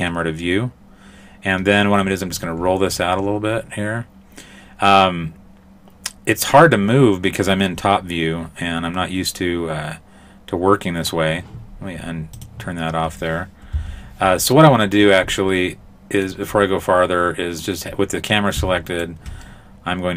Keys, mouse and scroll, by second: 2.0-2.6 scroll down 6, 2.9-6.8 scroll down 8, 6.8 middle click, 12.4 click, 13.8 n, 15.0-15.8 scroll down 3, 15.4 middle click, 18.9 shift+right click, 19.5 middle click.